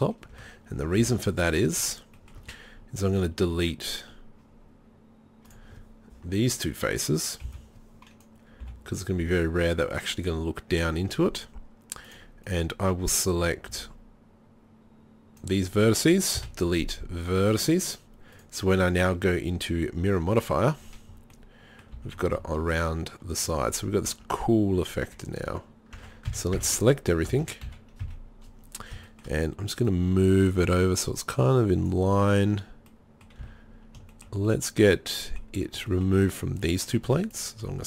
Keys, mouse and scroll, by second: 0.4 KP_7, 1.0 z, 2.2-2.5 middle drag, 7.5 b, 8.6 Delete, 13.7 b, 16.4 Delete, 21.4 middle click, 22.0 z, 22.2 middle click, 24.1 Tab, 24.4 Tab, 24.8 Tab, 25.1 Tab, 25.5 Tab, 26.0 Tab, 26.3-28.1 typing, 29.9-31.9 drag, 33.1 middle click, 33.5 z.